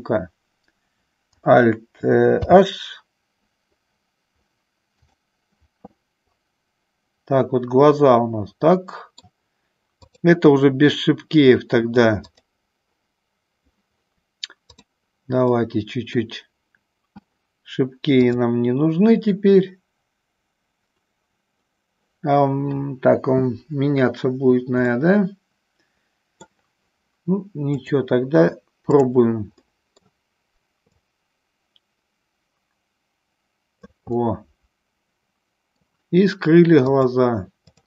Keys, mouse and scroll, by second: 3.0 alt+h, 8.1-9.4 middle drag, 10.1 click, 12.4 click, 15.7 middle click, 18.4-20.9 drag, 25.0-27.0 middle drag, 27.8-29.2 drag, 29.9 middle click, 31.2-34.3 drag, 34.4-36.0 middle drag, 37.1 click.